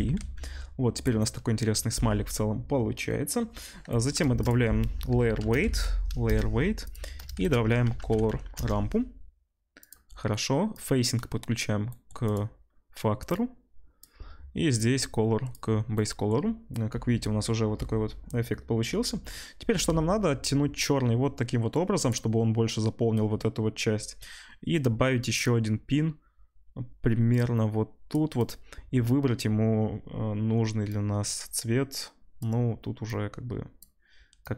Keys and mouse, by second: 0.3 ctrl+s, 4.2 shift+a, 6.9-10.7 middle drag, 10.7-12.3 drag, 12.3-13.3 middle drag, 13.3-28.5 drag, 28.5-34.5 middle drag.